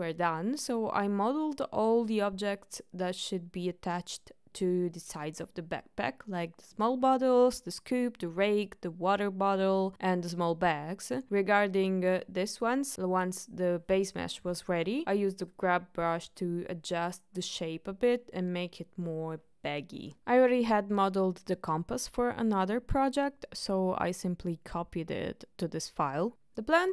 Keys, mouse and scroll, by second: 0.3-1.4 middle drag, 2.2 middle click, 4.0-4.7 ctrl+middle drag, 8.2 middle drag, 9.3-9.9 middle drag, 10.2-10.8 shift+middle drag, 11.3-11.6 ctrl+shift+middle drag, 15.9-17.8 ctrl+middle drag, 20.3-20.9 shift+middle drag, 21.1-22.4 middle drag, 22.7-23.0 ctrl+middle drag, 23.1 shift+middle drag, 23.5 middle click, 24.3 click, 24.8 middle click, 25.5 click, 26.4 click.